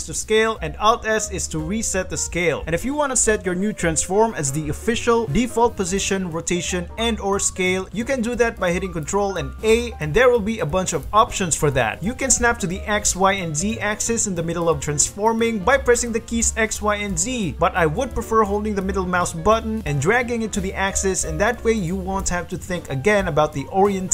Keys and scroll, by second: 1.0 alt+s, 1.7 s, 2.3 alt+s, 3.3 alt+s, 4.4 g, 5.2 s, 5.8 r, 9.2 ctrl+a, 12.9-16.9 typing.